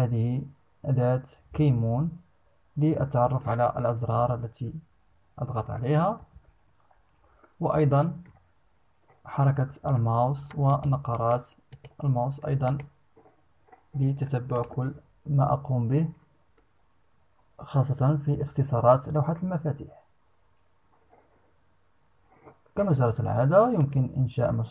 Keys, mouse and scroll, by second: 5.4-6.7 typing, 7.8 m, 9.0-9.4 scroll down 2, 9.4-9.8 scroll up 2, 9.9 scroll down 2, 10.2 click, 10.7 right click, 11.2 click, 12.2 right click, 14.1 click, 23.4 click.